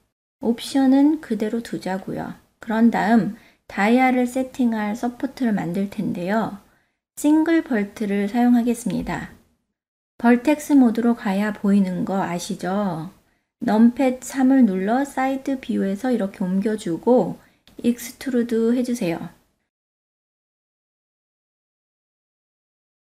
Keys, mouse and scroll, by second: 3.3 click, 4.0-4.4 shift+middle drag, 4.5-5.0 ctrl+middle drag, 5.2-6.2 middle drag, 7.9 shift+a, 12.5 click, 14.8 KP_3, 16.0-18.3 drag, 19.5 click, 19.9-21.3 drag, 22.5 e.